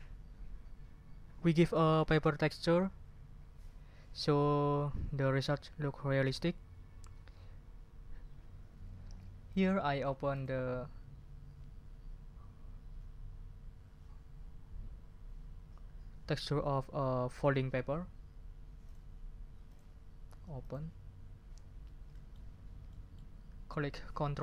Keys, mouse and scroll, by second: 9.5 click, 10.3 click, 18.9 click, 19.6 click, 20.6 click, 22.1 ctrl+click, 22.5 ctrl+scroll down 2, 22.9 ctrl+click.